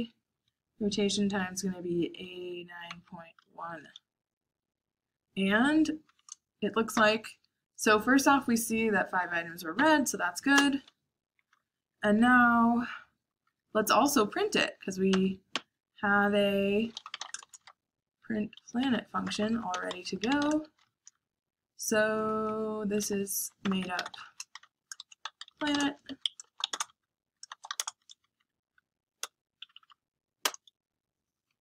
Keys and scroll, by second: 1.7-3.8 typing, 8.7 Up, 9.1 Up, 9.7 Up, 10.5 Return, 11.3-21.1 typing, 23.0-26.1 typing, 27.3-30.3 typing, 30.3 Return.